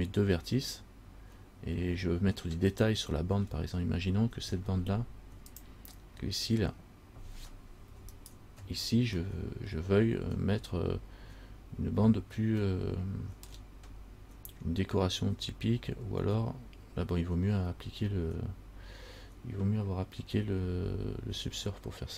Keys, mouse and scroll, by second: 3.0 middle click, 3.6 scroll down 1, 5.7 click, 8.3 alt+right click, 9.5 middle click, 11.5 scroll up 3, 12.9 shift+middle click.